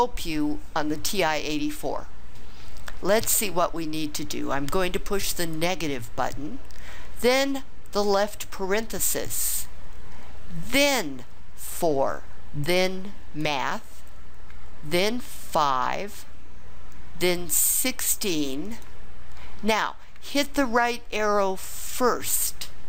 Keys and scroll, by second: 8.1 (, 11.6 4, 15.5 5, 17.7 1, 18.7 6, 21.9 ).